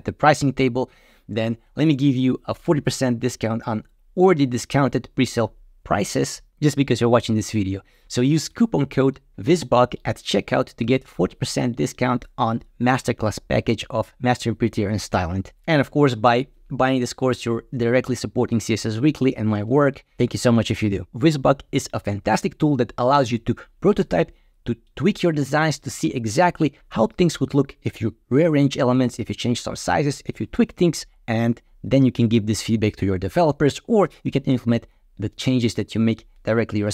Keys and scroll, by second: 19.6 typing.